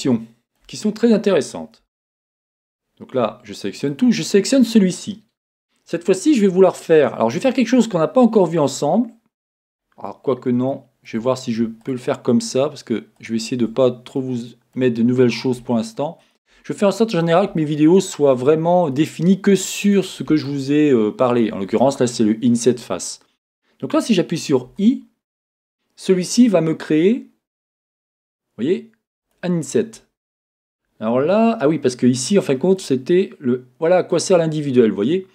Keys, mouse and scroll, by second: 1.8 Tab, 3.1 a, 3.9-8.0 drag, 9.7-10.7 scroll down 2, 10.7-11.8 shift+middle drag, 11.8-14.1 shift+drag, 14.1-16.2 middle drag, 16.2 shift+click, 16.8-31.1 middle drag, 18.5-18.9 scroll down 2, 35.1 middle click.